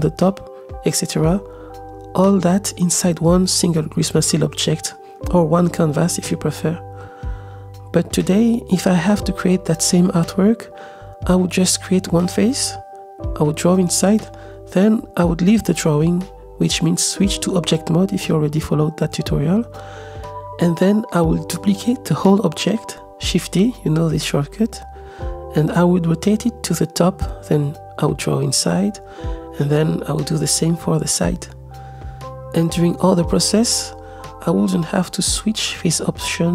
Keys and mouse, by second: 1.1 click, 1.6 click, 2.4 click, 3.1 click, 4.3-7.1 middle drag, 7.9-9.8 drag, 10.3 middle click, 11.3 click, 11.4 middle click, 12.9 click, 13.4 middle click, 14.0 click, 14.6 click, 16.1 click, 20.3 click, 21.1 shift+d, 21.8 z, 23.6 r, 23.6 x, 26.0 g, 27.2 Tab, 27.5 a, 27.9 x, 28.4 click, 28.8 ctrl+z, 29.0-30.4 drag, 30.7 ctrl+Tab, 31.1 ctrl+z, 31.1-32.4 typing, 32.4 Tab, 33.2 middle click, 33.8 click, 34.5 ctrl+Tab, 34.6-35.5 middle drag, 36.0 click.